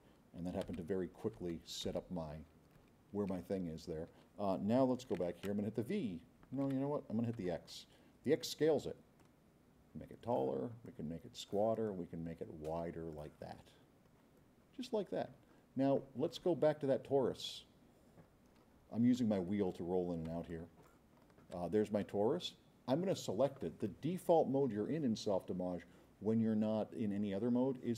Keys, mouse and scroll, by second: 0.6 g, 1.5 g, 5.5 v, 7.4 x, 9.2-10.5 drag, 10.8 click, 11.9-13.3 drag, 13.8 middle click, 14.4 middle click, 15.0 middle click, 15.4 middle click, 16.8 scroll down 2, 17.4 scroll up 2, 18.1 middle click, 18.4-18.8 scroll down 2, 19.0 scroll up 2, 19.4 scroll down 1, 19.7 scroll up 2, 19.9 middle click, 20.4 s, 21.1 middle click, 21.1 scroll up 1.